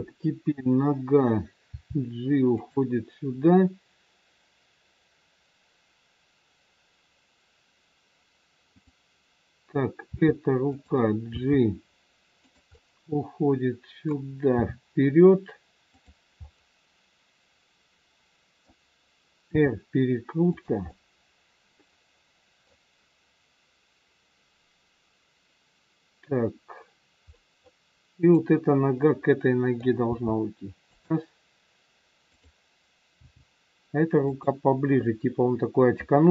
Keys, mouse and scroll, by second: 1.7 g, 8.7 click, 10.0 r, 11.4 g, 12.8 middle click, 14.5 g, 16.4 middle click, 16.4 scroll up 1, 19.5 r, 20.8 middle click, 23.1-23.9 scroll down 3, 27.3 middle click, 28.2 click, 28.9 middle click, 30.0 g, 32.2 click, 33.2 g.